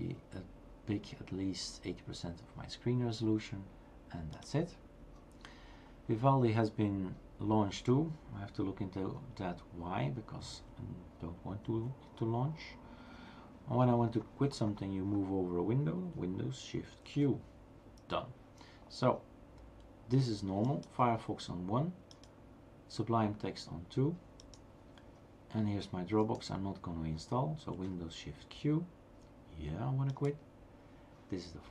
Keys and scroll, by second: 17.2 shift+super+q, 28.4 shift+super+q.